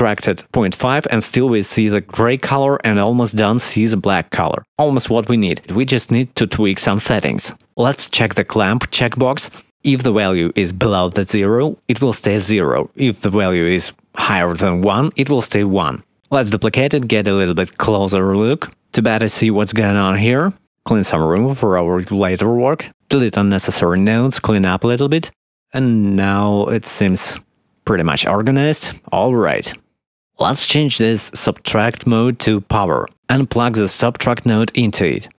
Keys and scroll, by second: 15.5 shift+d, 23.5 x.